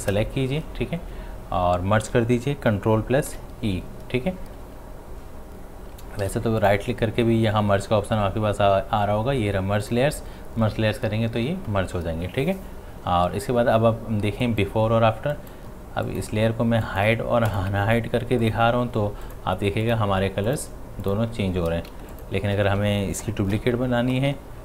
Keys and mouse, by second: 0.0 shift+click, 3.3 ctrl+e, 6.2 ctrl+z, 6.6 right click, 9.8 click, 14.5 click, 21.9 space, 22.1 ctrl+alt+click, 23.5 c.